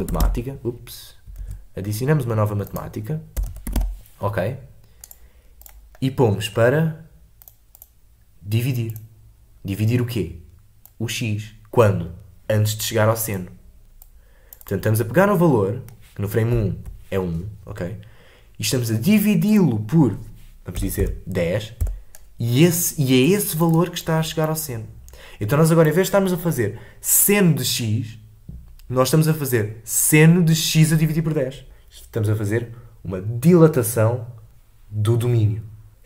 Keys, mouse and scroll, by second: 8.9-16.6 drag, 16.6 alt+scroll down 1, 21.8-36.0 drag.